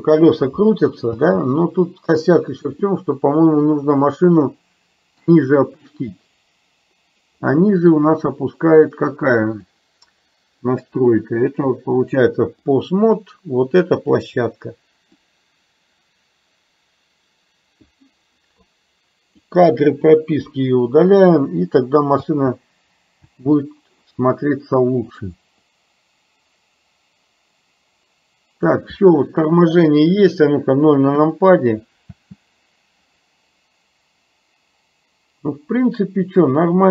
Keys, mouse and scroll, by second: 2.9-5.3 middle drag, 2.9 space, 7.5 middle click, 9.7 click, 11.5-12.9 drag, 14.0 click, 15.2 click, 15.5-18.0 drag, 18.7-19.5 drag, 20.5 Delete, 22.3 space, 25.3 click, 25.7-28.8 drag, 31.3 KP_0, 32.2 space.